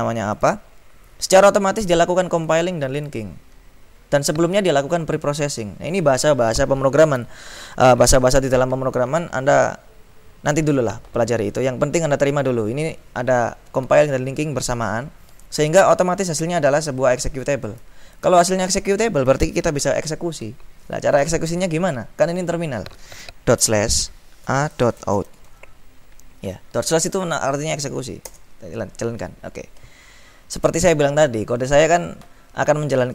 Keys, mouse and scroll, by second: 2.6-3.7 drag, 17.4-18.9 drag, 23.6-26.1 typing, 28.4 Return.